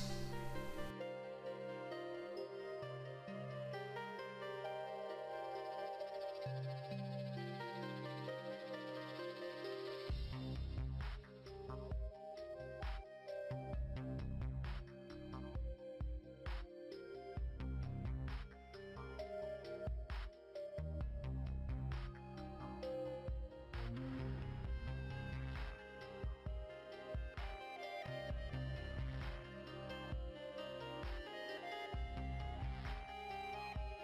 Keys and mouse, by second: 1.4 middle click, 2.1 right click, 2.3 click, 2.6 middle click, 2.7 right click, 2.9 click, 3.1-4.4 middle drag, 4.4 click, 4.4 right click, 5.0 click, 5.2 middle click, 5.2-8.0 typing, 5.6 middle click, 8.7 middle click, 10.4 i, 12.7-13.1 KP_4, 14.2 middle click, 15.7 g, 17.2 a, 17.3 middle click, 18.5 middle click, 19.0 right click, 19.1 middle click, 19.2 right click, 19.3-20.4 middle drag, 20.4 right click, 21.1-21.8 typing, 22.3 middle click, 22.8 KP_4, 23.2 middle click, 23.8 middle click, 24.3 middle click, 24.8 i, 26.0 i, 26.8 a, 27.0 KP_1, 27.4 middle click, 28.5 ctrl+Tab, 29.2 click, 29.3 right click, 29.5 right click, 29.7 middle click, 30.3 g, 31.2 a, 31.4 ctrl+Tab, 31.9 middle click, 32.6 KP_1, 32.8 middle click, 33.7 middle click.